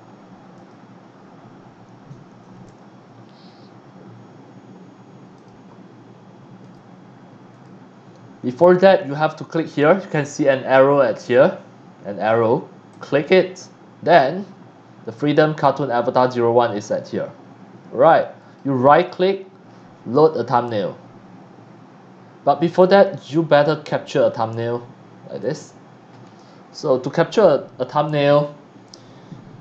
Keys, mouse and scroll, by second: 0.5 click, 5.3 click, 6.6 click, 7.5 click, 8.4 click, 12.9 click, 18.4 right click, 25.4 click, 26.2-26.7 scroll up 2, 27.3 middle click.